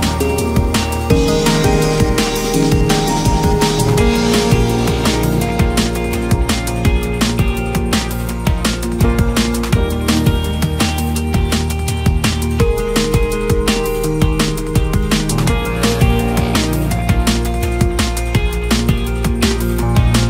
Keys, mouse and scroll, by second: 0.7 u, 0.9 Tab, 1.5 Tab, 2.2 Tab, 2.4-3.3 scroll down 5, 3.3 click, 3.7 Tab, 4.0 Tab, 4.5 click, 5.3-6.8 shift+middle drag, 6.8 click, 7.3-7.9 scroll up 2, 7.9-8.9 scroll up 1, 8.9 scroll up 1, 9.1-19.0 drag.